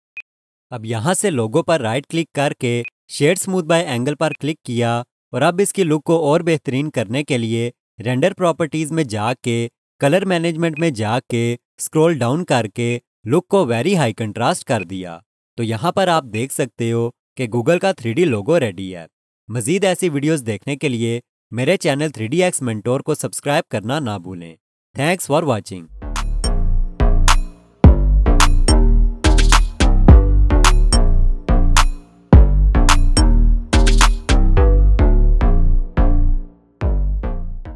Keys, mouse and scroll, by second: 0.1 click, 2.8 right click, 6.3 click, 9.2 click, 9.8-10.7 scroll down 1, 11.1-11.8 scroll down 1, 14.6 click, 14.8 alt+click, 15.9-16.3 scroll up 1, 16.3 alt+click, 17.3-17.7 alt+scroll down 1, 17.7 alt+click, 18.3 alt+click, 20.8 alt+click.